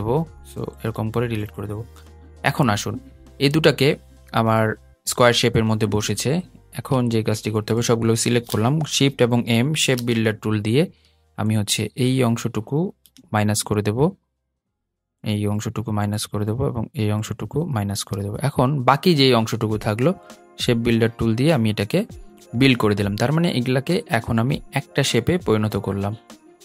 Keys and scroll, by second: 9.0 shift+m.